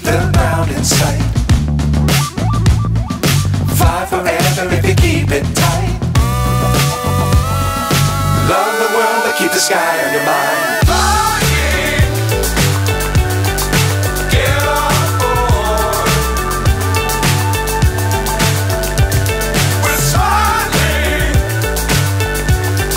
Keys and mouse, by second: 1.1-2.1 drag, 2.9 click, 3.8 click, 6.6-8.2 drag, 8.5 click, 9.6-12.0 drag, 14.4-15.4 drag, 15.8-17.6 drag, 19.1-21.4 drag, 22.0-22.9 drag.